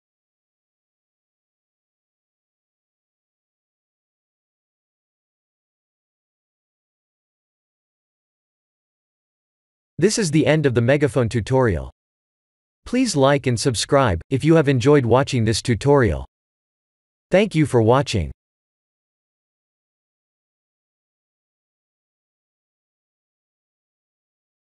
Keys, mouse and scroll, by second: 0.2 shift+`, 6.8 click.